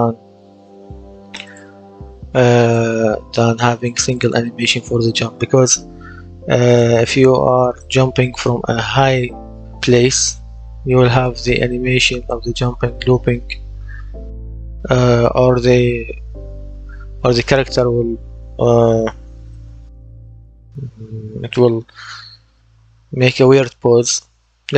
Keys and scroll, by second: 18.5-20.4 typing, 24.6 d.